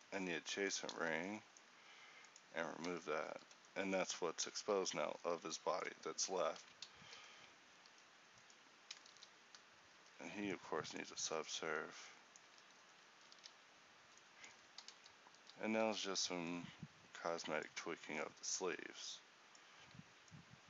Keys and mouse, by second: 2.9 Tab, 3.3 z, 7.9 a, 9.3 ctrl+t, 10.0 a, 12.5 Tab, 13.2 a, 15.4 z, 15.9 a, 19.1-20.6 drag.